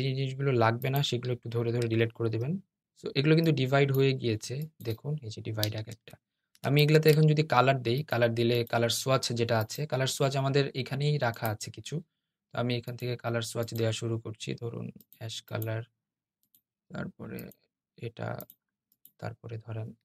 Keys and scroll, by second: 5.6 super+z.